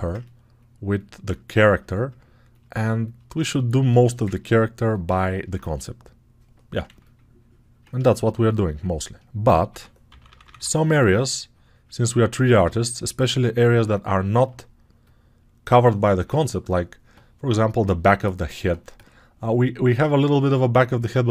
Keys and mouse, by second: 8.3-21.3 right drag, 9.6 6, 9.9 ], 10.1 ], 12.5 g.